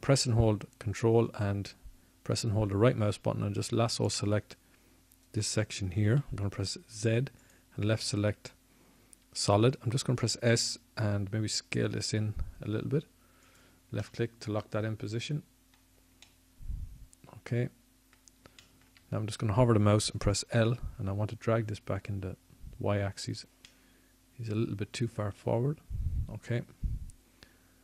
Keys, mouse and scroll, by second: 3.0 a, 11.1 z, 15.2 s, 18.7 click, 19.6-22.7 middle drag, 25.5 l.